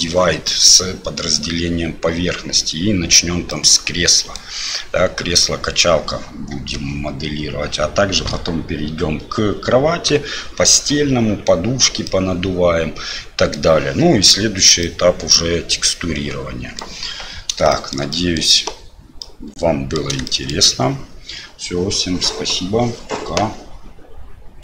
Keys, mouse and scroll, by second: 3.5 middle click, 12.0-13.5 middle drag, 14.8-16.8 middle drag, 17.7 shift+middle click, 18.1 middle click, 19.2 middle click, 20.2 shift+middle click.